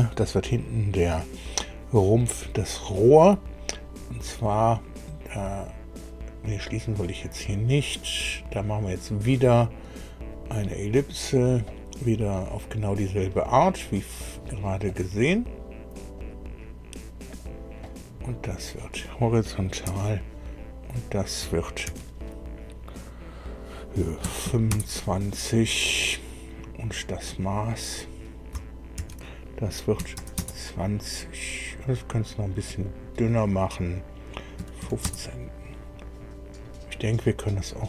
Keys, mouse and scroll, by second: 5.3-6.5 drag, 9.0 click, 10.2 click, 11.3 click, 14.2 click, 14.8 click, 16.1 click, 17.2 click, 17.8 right click, 18.6 click, 19.8 h, 20.8 click, 21.8 shift+d, 24.2 KP_2, 24.4 KP_5, 24.6 KP_Enter, 27.8 click, 28.9 shift+d, 29.9 KP_2, 30.1 KP_0, 30.3 KP_Enter, 32.6 click, 34.5 KP_1, 34.8 KP_5, 35.0 KP_Enter.